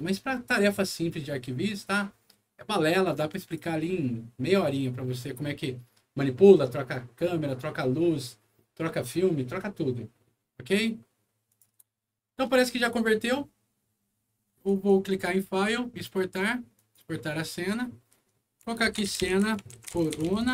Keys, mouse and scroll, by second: 3.2 click, 11.4 click, 12.8 click, 14.6 click, 16.7 click, 18.8-20.5 typing.